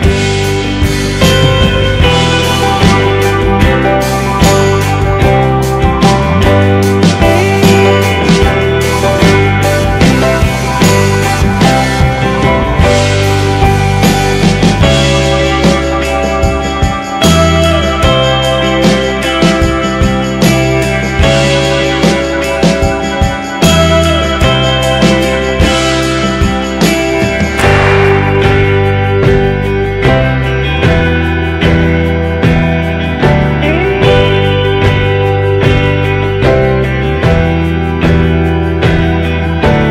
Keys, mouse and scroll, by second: 2.9 a, 5.4 a, 13.1 middle click, 25.9 click, 33.7 a, 34.0 a, 34.6 a.